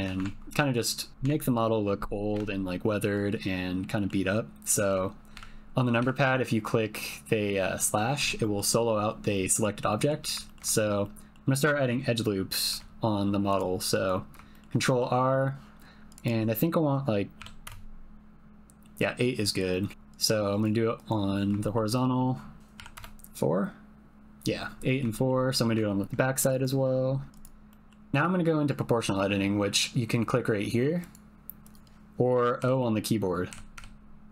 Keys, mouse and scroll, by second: 0.2 Tab, 1.3 Tab, 3.4 middle click, 4.7 click, 8.4 click, 9.3 click, 9.5 middle click, 9.8 middle click, 10.4 ctrl+middle click, 10.7 shift+middle click, 11.0 middle click, 12.6 ctrl+r, 14.9 click, 16.1-17.9 drag, 19.7 middle click, 19.9 ctrl+r, 21.3 middle click, 21.7 shift+middle click, 22.0 middle click, 22.6 click, 24.8 middle click, 25.1 shift+middle click, 25.6 middle click, 25.6 click, 26.0 ctrl+r, 27.7 click, 28.4 middle click, 31.0 click, 31.6 click, 32.6 o, 33.5 o, 33.7 o.